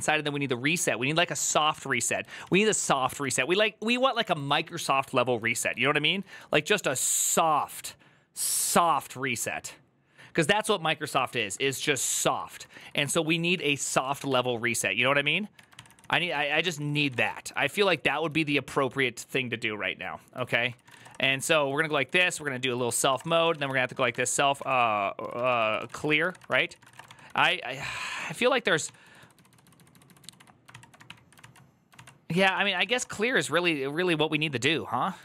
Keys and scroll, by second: 1.2-6.6 typing, 10.9 ctrl+u, 10.9 typing, 12.0 ctrl+u, 12.0-18.3 typing, 21.4-22.1 typing, 23.5-27.2 typing, 28.7-29.5 typing, 30.9-33.2 typing, 34.9-35.2 typing.